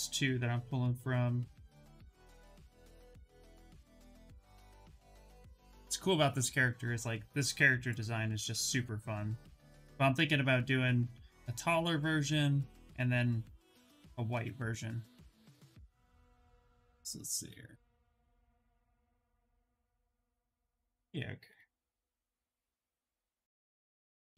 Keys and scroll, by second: 24.1 shift+f.